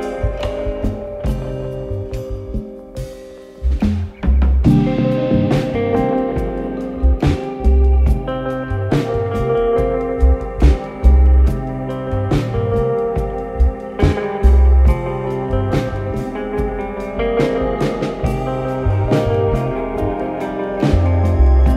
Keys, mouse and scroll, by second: 4.3 click, 5.5 click, 5.9 n, 7.2 click, 8.6 click, 8.7 click, 9.2-10.1 typing, 11.4 click, 11.6 click, 11.9-14.1 typing, 16.1 alt+middle click, 16.6 click, 18.5 click, 21.2 click.